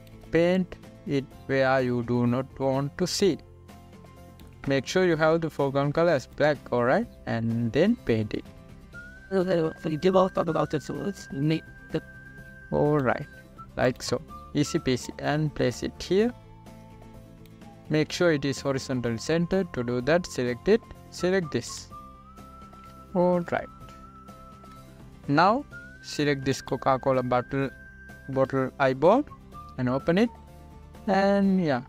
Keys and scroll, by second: 1.0 space, 25.1 ctrl+=.